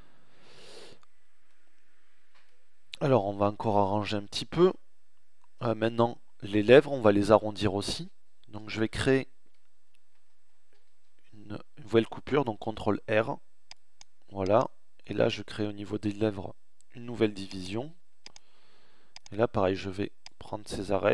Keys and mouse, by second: 3.2 Tab, 9.6 ctrl+r, 12.8 ctrl+r.